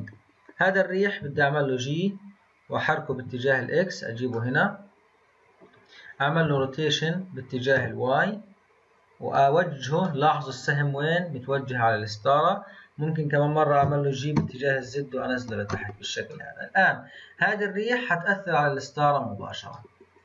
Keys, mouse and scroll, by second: 1.2 g, 4.3-6.4 middle drag, 6.4 r, 10.0-13.8 middle drag, 13.8 g, 15.7 click, 16.3-20.2 middle drag.